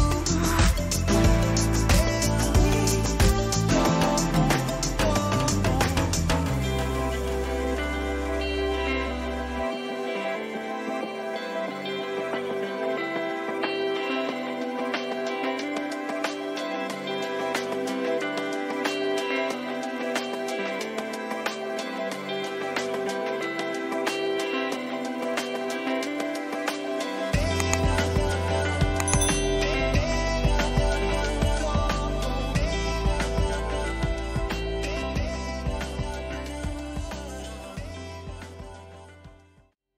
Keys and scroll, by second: 3.1 ctrl++, 10.9 ctrl+z, 23.4 ctrl++, 26.1 ctrl+-, 27.2 ctrl++, 31.3 ctrl+-, 31.8 ctrl++.